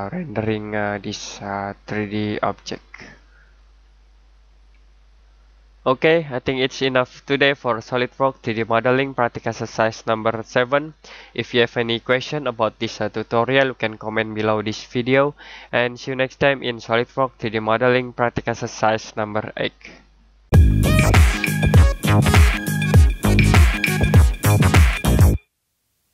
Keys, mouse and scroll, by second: 0.4 click.